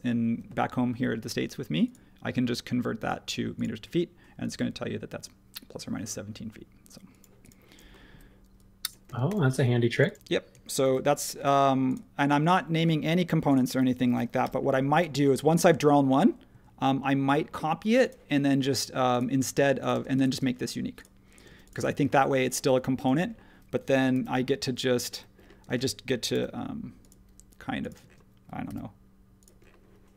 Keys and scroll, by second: 8.0 e, 9.0 space, 10.8 shift+g, 14.4 m, 19.9 space, 21.4 space, 24.1 q, 25.6 space, 26.3 m, 28.0 space, 28.6 q.